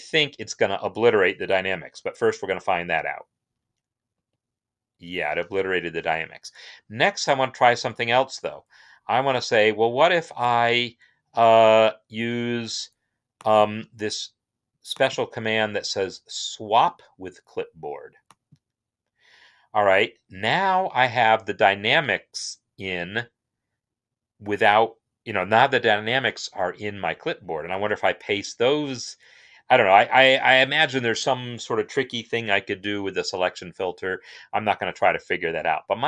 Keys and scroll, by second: 4.0 ctrl+v, 5.5 ctrl+z, 29.3 ctrl+v.